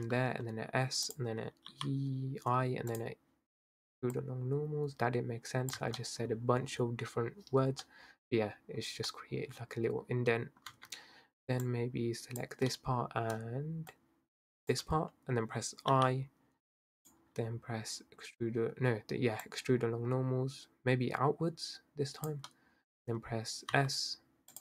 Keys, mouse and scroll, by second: 0.0 s, 1.7 i, 4.2 click, 5.8 Tab, 6.0-10.7 middle drag, 10.7 Tab, 11.6 click, 12.7-13.9 middle drag, 13.9 shift+click, 15.9 i, 19.4 click, 22.5-23.3 middle drag, 23.3-23.8 scroll up 1, 23.8 s.